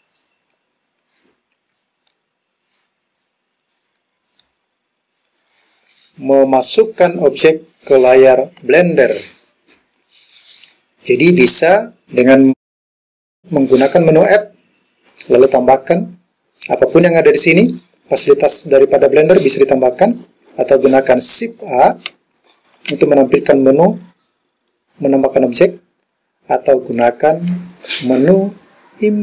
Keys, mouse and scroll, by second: 0.6 click, 2.1-4.5 middle drag, 5.3 click, 8.7 KP_Decimal, 14.3-20.0 drag, 20.5 click, 22.2 shift+a, 27.9-29.2 drag.